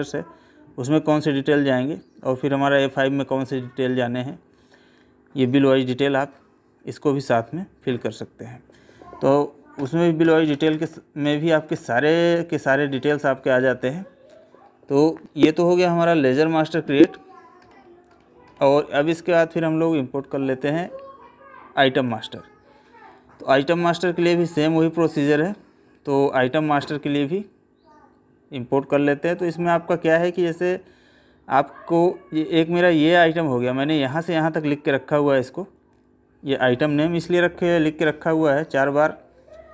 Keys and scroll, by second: 14.6 Escape, 38.3 Right.